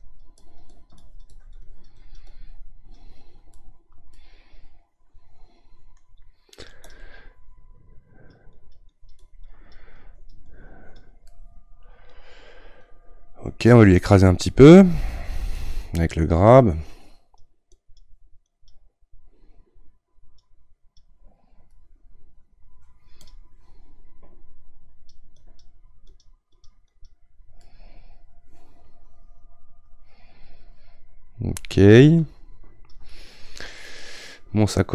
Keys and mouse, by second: 3.5-6.9 middle drag, 6.9-11.3 drag, 11.3-15.6 middle drag, 15.6-21.7 drag, 21.7-23.3 middle drag, 23.3-27.6 drag, 27.6-32.0 middle drag, 32.0-33.1 shift+drag, 33.1-34.9 middle drag.